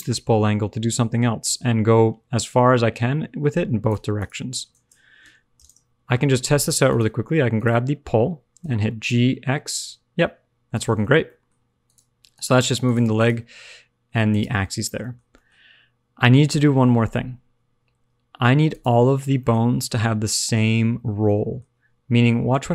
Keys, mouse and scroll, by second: 4.1 click, 5.2 KP_Enter, 6.8 click, 7.5 click, 8.6 g, 11.0 alt+r, 11.1 alt+g, 11.2 middle click, 11.8 click, 13.1 click, 13.6 g, 14.5 alt+r, 14.7 alt+g, 15.0 middle click, 15.4 shift+middle click, 15.6-16.1 scroll up 2, 19.2 click, 19.3 shift+middle click, 21.2 middle click, 21.2 scroll up 1.